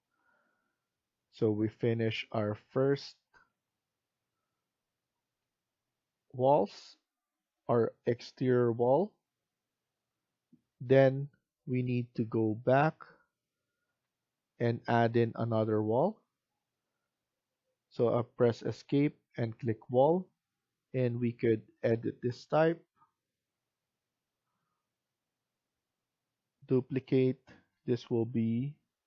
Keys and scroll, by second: 13.8 Escape.